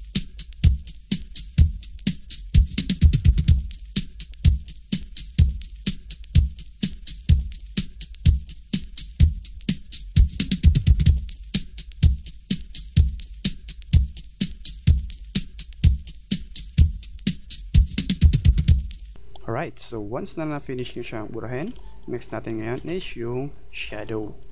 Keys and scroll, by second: 21.7 space.